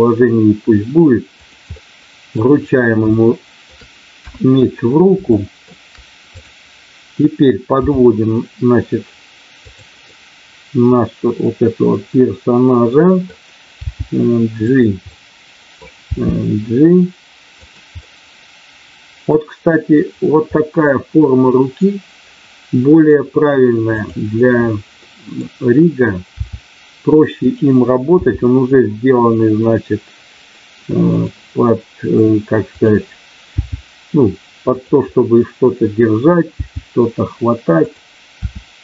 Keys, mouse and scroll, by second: 1.7 middle click, 3.0 shift+middle click, 4.2 KP_1, 5.3 middle click, 6.3 click, 7.8 g, 10.1-13.3 middle drag, 13.8 g, 14.5 click, 16.0 g, 17.5 click, 17.9-18.8 scroll up 1, 18.8 middle click, 20.5-21.5 scroll up 1, 21.5-22.8 scroll up 1, 22.8 scroll up 1, 24.9 middle click, 26.3 r, 27.4 click, 28.2 g, 31.1 click, 32.8 click, 33.6 g, 35.2-36.4 middle drag, 36.6 g, 37.8 click, 38.4 r.